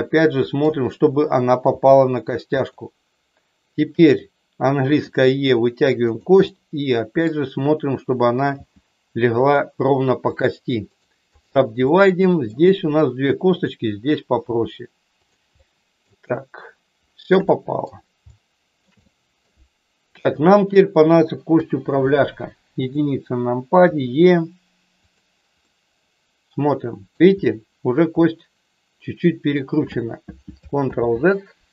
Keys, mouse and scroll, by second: 1.7 g, 2.6 click, 4.8 e, 6.1 click, 6.5 middle click, 8.6 g, 10.2 click, 10.9 right click, 11.8 middle click, 13.5 click, 14.5 g, 15.2 click, 15.6 middle click, 17.6 middle click, 18.2 shift+middle click, 19.0 middle click, 21.6 KP_1, 22.7 click, 23.8 e, 25.0 click, 25.7-27.1 middle drag, 27.1 scroll down 1, 28.2-29.6 middle drag, 30.8 ctrl+z.